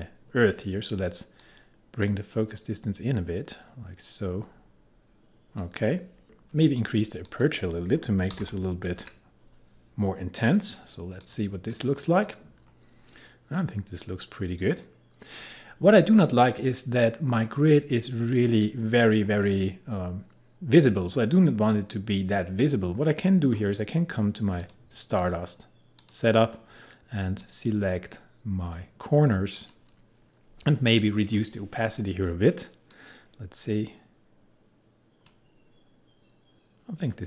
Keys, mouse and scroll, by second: 1.4-6.5 drag, 7.3 click, 8.1-8.9 typing, 11.3 click, 12.6-14.4 scroll up 1, 14.9-16.7 scroll down 1, 23.3 scroll up 1, 24.6-29.6 drag, 33.0-37.2 drag.